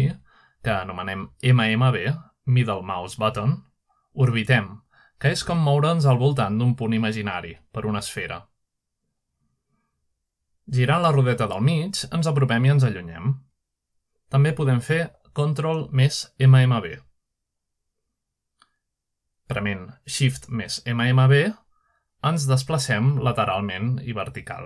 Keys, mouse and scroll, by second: 12.6-14.4 middle drag, 13.1-14.2 scroll down 1, 14.2-14.8 scroll up 1, 15.1-15.7 scroll up 2, 15.7-16.1 scroll down 2, 16.9-21.1 ctrl+middle drag.